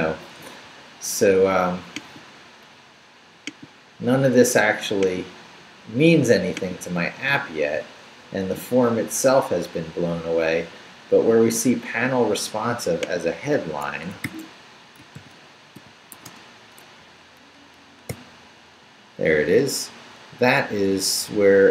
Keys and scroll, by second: 13.9 Escape, 14.2-16.1 typing, 16.2 Return, 18.1 n, 19.5 Down.